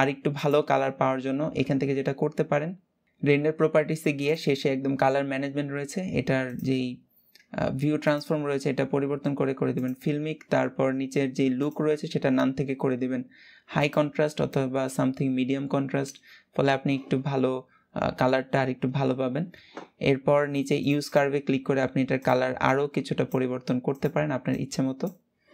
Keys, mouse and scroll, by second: 0.0 click, 3.0-25.5 drag.